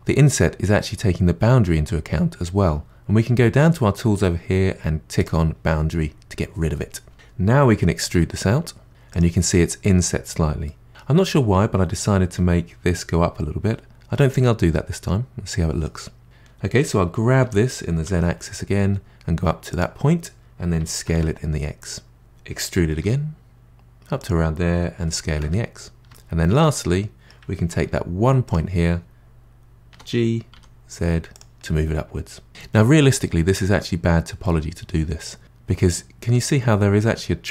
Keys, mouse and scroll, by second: 5.2 click, 8.2 e, 10.6-13.4 middle drag, 14.4-16.2 middle drag, 16.2-17.4 scroll down 3, 17.4 g, 20.8 s, 22.9 e, 25.0 s, 26.1-27.8 middle drag, 27.8 1, 28.4 click, 29.9 g, 31.6 middle click, 32.6-33.1 scroll up 4, 33.1 middle click, 33.7-34.4 scroll up 2, 34.4-37.0 middle drag.